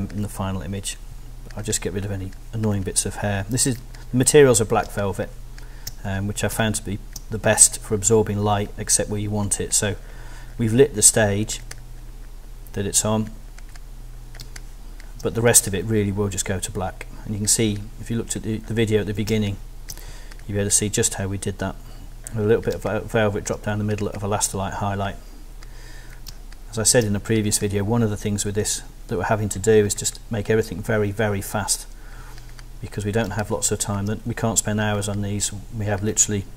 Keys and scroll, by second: 4.8 alt+space, 6.5 alt+space, 14.4 alt+space, 15.4 alt+space, 19.3 alt+super+space, 20.1 alt+super+space, 22.8 space, 23.7 alt+space, 26.3 alt+space, 27.2 space, 33.3 alt+space, 34.3 alt+space.